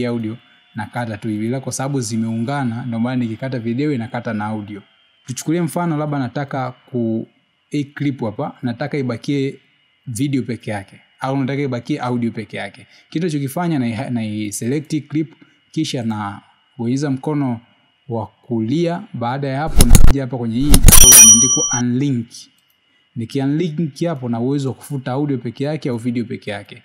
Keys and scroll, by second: 1.9 c, 8.8 v.